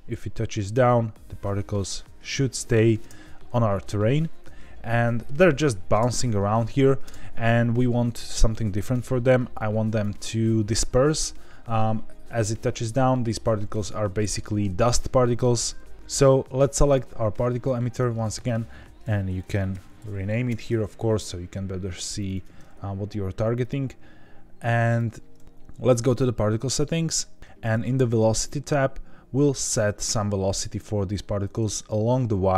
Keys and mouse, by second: 3.0 space, 5.2 middle click, 5.9 space, 7.0 space, 8.9-10.0 drag, 12.9 middle click, 14.1 shift+middle drag, 15.4-15.9 drag, 18.2-20.9 drag, 19.7 t, 22.1 click, 22.3-23.6 drag, 24.8 click, 26.0 click, 28.0 click.